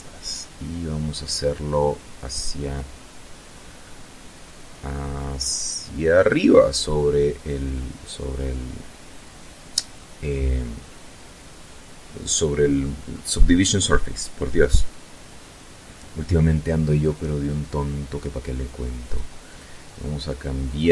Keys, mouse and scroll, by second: 5.2 click, 16.2 click, 17.2 click, 18.1 click, 18.5 click, 19.7 click, 20.8 click.